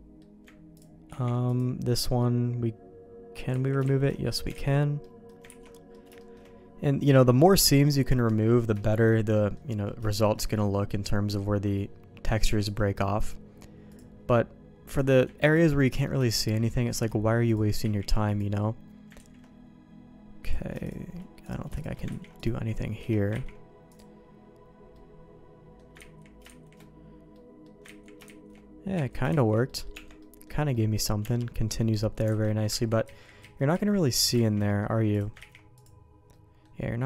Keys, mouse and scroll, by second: 0.7 ctrl+click, 1.1 ctrl+e, 2.2-3.3 middle drag, 3.5 ctrl+z, 4.2 middle click, 4.5 alt+a, 5.0 middle click, 5.5 ctrl+s, 5.7 middle click, 6.2 shift+middle click, 8.8 shift+middle click, 9.3 middle click, 10.5 middle click, 11.3 middle click, 12.5 alt+click, 13.9-15.2 drag, 15.8 middle click, 16.2 shift+middle click, 17.4 ctrl+click, 17.8 ctrl+e, 19.1 ctrl+z, 20.4 click, 20.8 shift+click, 21.4 click, 22.1 ctrl+e, 23.5 ctrl+e, 24.9 middle click, 26.3 ctrl+z, 27.3 middle click, 27.8 ctrl+z, 28.9 ctrl+z, 29.6 middle click, 29.9 Tab, 30.2 middle click, 30.7 middle click, 31.2 Tab, 32.3 alt+a, 32.7 ctrl+z, 33.1 ctrl+z, 33.6 ctrl+z, 33.7 ctrl+z, 34.3 ctrl+shift+z, 34.6 middle click, 35.1 click, 35.6 ctrl+e, 36.3 middle click.